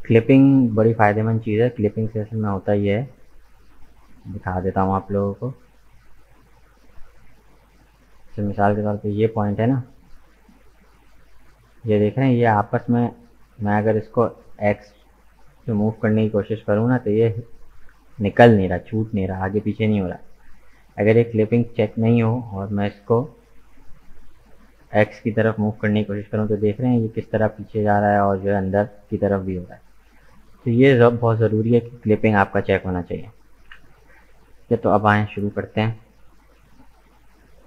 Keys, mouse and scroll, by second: 0.5-3.1 scroll up 2, 3.1 Tab, 5.4-7.2 drag, 7.2 g, 8.8-10.2 drag, 10.2 g, 21.2-22.9 drag, 22.9 g, 31.6-33.7 drag, 33.7 KP_1, 35.1-35.7 scroll down 2, 35.7-37.6 shift+middle drag.